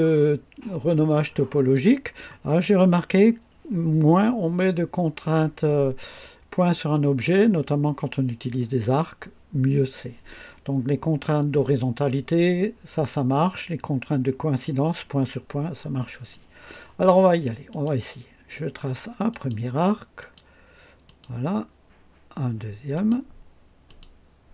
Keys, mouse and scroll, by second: 17.7 click, 19.3 click, 20.2 click, 21.0 click, 22.9 click, 23.8 click.